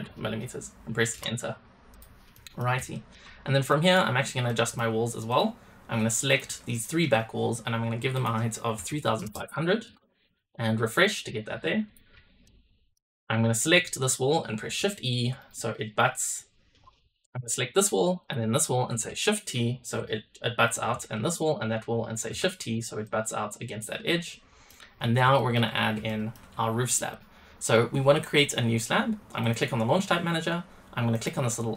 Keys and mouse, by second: 1.9 click, 2.3 middle drag, 2.9 shift+click, 3.6 middle click, 4.4 middle drag, 5.2 click, 6.2-6.7 shift+drag, 8.2-9.8 drag, 9.3 KP_0, 10.2 click, 11.2 click, 11.8 click, 12.4 shift+click, 14.8 shift+e, 15.3 click, 18.2 shift+click, 19.4 shift+t, 20.6 drag, 21.3 shift+click, 22.3 shift+t, 23.0 click, 23.7-24.6 middle drag, 25.3 shift+middle drag, 26.0 shift+middle click, 27.0-29.3 drag, 29.3-31.7 right drag.